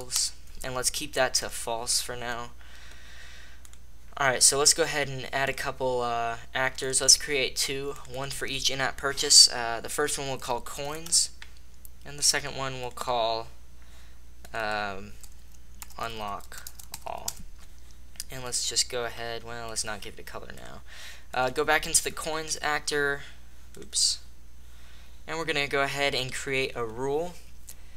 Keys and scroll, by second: 0.1 Return, 0.3 space, 11.2 Return, 16.6 space, 17.2 Return.